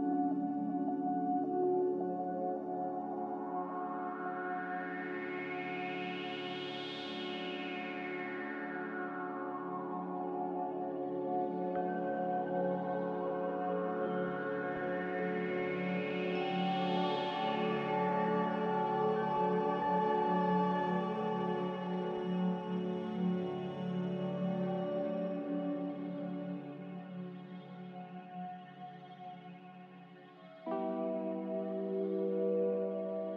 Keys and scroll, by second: 4.1 s, 5.3-6.2 typing, 7.6 Tab, 11.0-11.8 typing, 12.0 Return, 15.1-17.4 typing, 27.7 z, 30.1 Return.